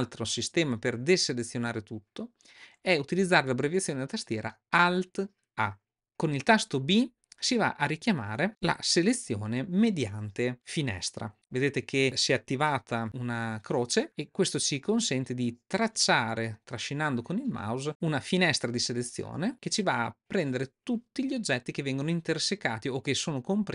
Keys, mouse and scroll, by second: 0.7 click, 8.5 b.